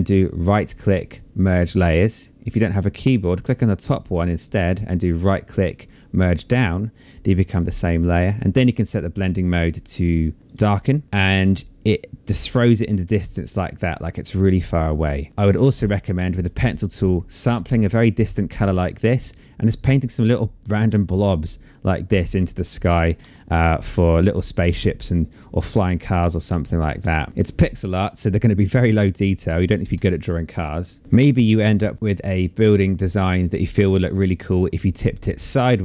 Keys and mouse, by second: 1.2 click, 3.6 right click, 5.0 click, 7.4 click, 10.4 click, 12.3 click, 15.3 click, 15.9 alt+click, 18.4 click, 20.5 click, 21.8 click, 22.8 click, 26.8 ctrl+z, 28.1 click.